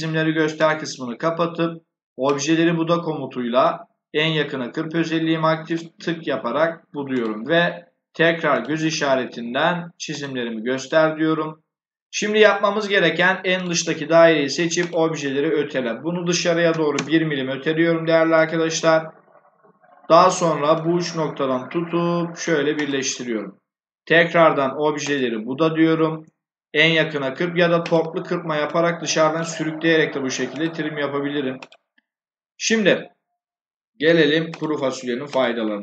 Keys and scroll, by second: 16.6 1, 16.8 Return.